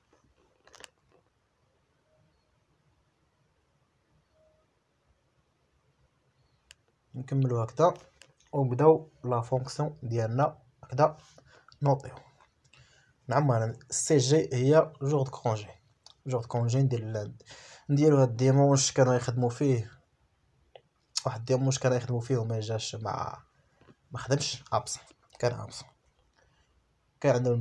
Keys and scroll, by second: 0.5 Return, 3.6 BackSpace, 5.9-9.7 typing, 11.5-15.1 typing.